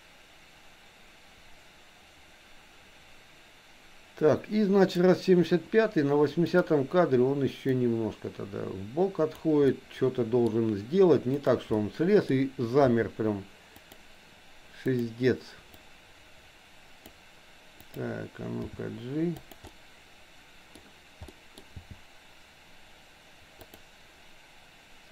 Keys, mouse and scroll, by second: 6.4 click, 7.9-9.5 drag, 9.7 middle click, 11.4 click, 11.8 middle click, 12.9 r, 14.8 click, 16.0-17.2 drag, 17.9 click, 18.8 g, 19.7-20.8 middle drag, 21.3 scroll up 1, 21.4 middle click, 21.8 g.